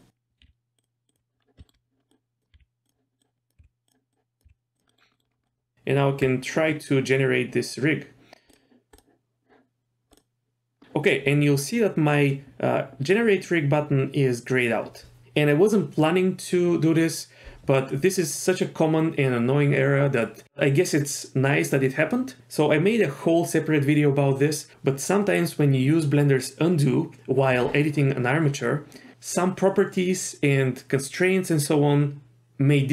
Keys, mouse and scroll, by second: 0.4 g, 1.1 click, 1.4 scroll down 1, 1.6 shift+middle click, 1.9 scroll up 1, 2.1 click, 2.5 g, 3.2 click, 3.6 g, 4.1 click, 4.4 g, 4.9 middle click, 5.0 scroll down 1, 5.1 middle click, 5.3 scroll up 1, 5.4 middle click, 5.7 Tab, 8.9 drag, 10.1 click, 10.8 click.